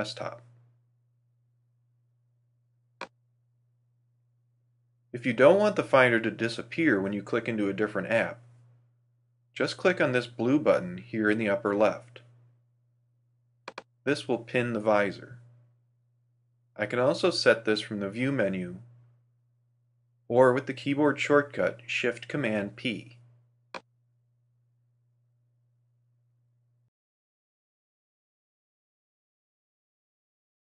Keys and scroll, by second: 0.8 alt+super+v.